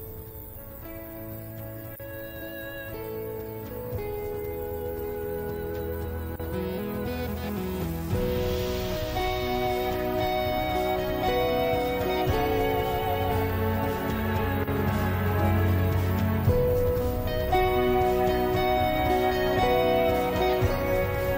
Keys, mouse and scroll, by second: 0.8-2.5 drag, 4.1-5.2 drag, 5.5 middle click, 6.9 click, 8.3-10.1 drag, 10.9-12.5 drag, 13.1 middle click, 14.4 shift+middle click, 15.7-16.7 drag, 19.1 shift+middle click.